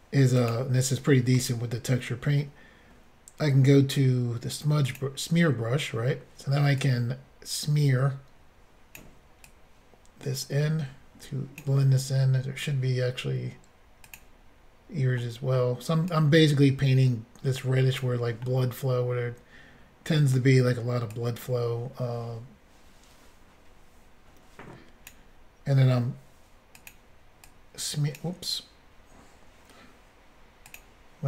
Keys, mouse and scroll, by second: 0.4 click, 0.5 click, 4.8 click, 4.9 click, 6.8 click, 9.5 click, 14.0 click, 14.1 click, 15.2 middle click, 16.1 click, 18.4 middle click, 19.2 scroll up 1, 21.1 click, 26.8 click, 26.9 click, 27.5 click, 28.2 click, 30.7 click, 30.8 click.